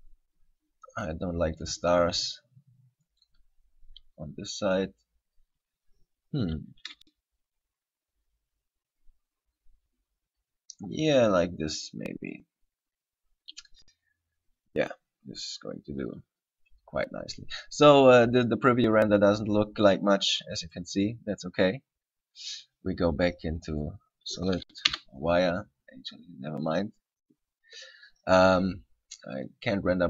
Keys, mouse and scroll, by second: 3.4 right click, 6.6 r, 12.6 click, 20.8 click, 25.1 z, 26.8 click, 29.5 click.